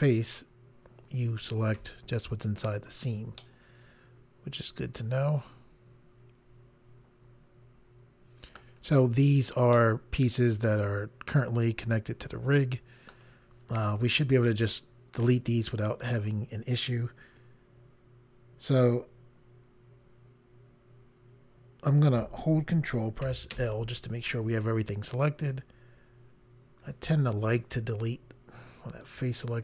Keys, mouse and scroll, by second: 1.8 i, 3.4 middle click, 9.8 middle click, 23.6 ctrl+i, 29.0 click.